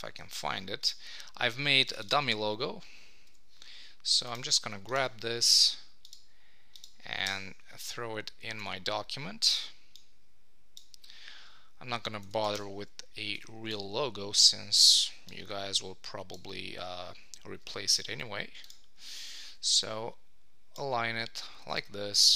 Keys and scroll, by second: 7.3 Return, 7.8 ctrl+Tab, 12.5 super+;, 19.1 super+d.